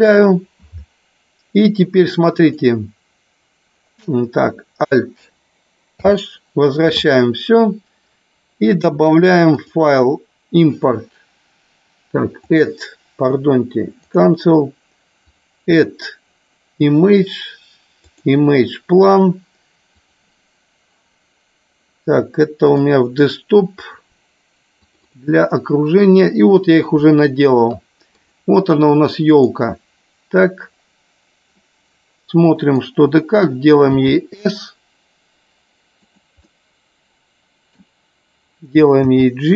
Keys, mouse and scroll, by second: 2.4-3.8 drag, 6.1 alt+h, 9.7-14.2 drag, 15.4-18.4 drag, 31.6-32.8 middle drag, 36.0 click, 36.6 scroll up 1, 36.7-37.8 middle drag.